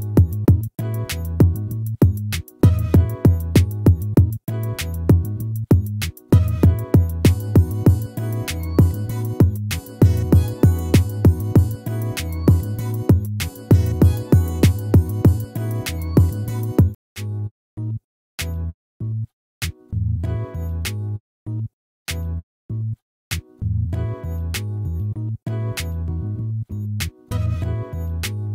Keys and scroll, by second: 5.3 ctrl+-, 7.2 ctrl++, 27.6 ctrl+-.